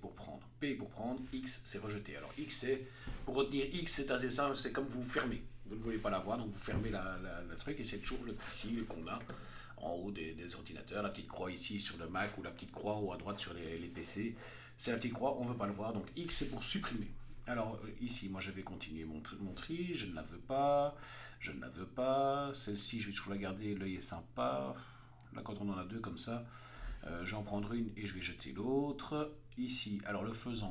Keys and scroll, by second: 18.2 Right, 19.9 x, 20.3 Right, 21.0 x, 21.4 Right, 23.3 Right, 24.3 Left, 24.8 Right, 25.3 Left, 25.7 Right, 27.3 p, 27.8 Left, 28.0 x, 28.2 Right.